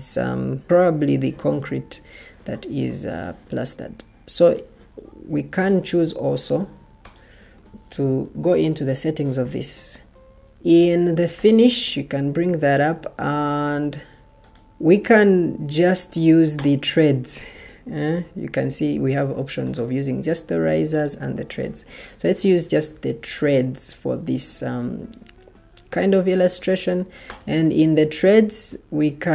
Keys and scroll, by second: 6.5 Escape, 8.1 ctrl+t.